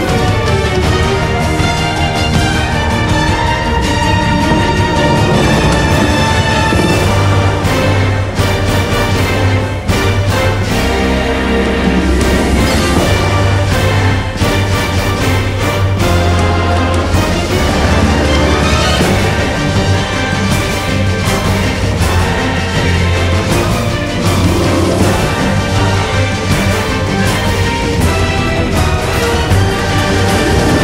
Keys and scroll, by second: 2.2-3.7 typing, 7.2 1, 7.5 Return, 9.7-12.0 typing, 13.0-15.2 typing, 16.7-21.4 typing, 22.9 t, 24.1-25.0 typing, 27.9 Delete.